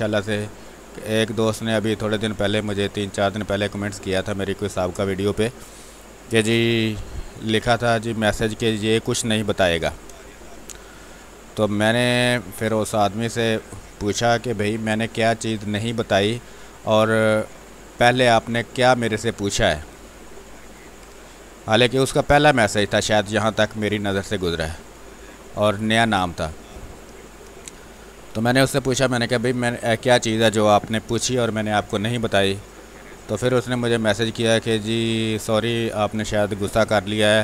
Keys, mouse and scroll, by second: 2.6-4.6 drag, 30.6 click, 32.6 space, 34.6 w, 36.6-37.4 drag.